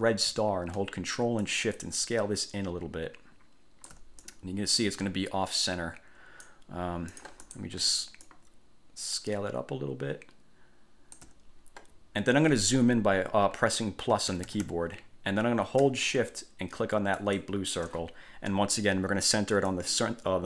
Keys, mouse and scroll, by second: 1.6-4.3 ctrl+shift+drag, 4.4-6.8 ctrl+shift+drag, 7.3 click, 8.4 ctrl+shift+click, 14.3 =, 15.7 scroll down 2, 17.3 shift+click, 19.9 click.